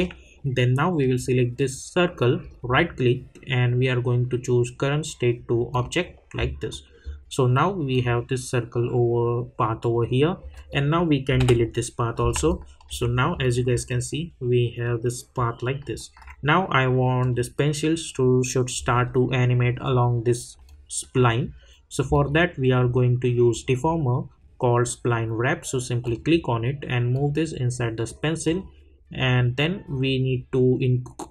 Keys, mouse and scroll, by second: 2.5 right click, 5.7 click, 10.5 click, 12.5 alt+click, 13.9-17.2 alt+drag, 20.5 click, 20.6-22.1 alt+drag, 26.0-28.4 drag.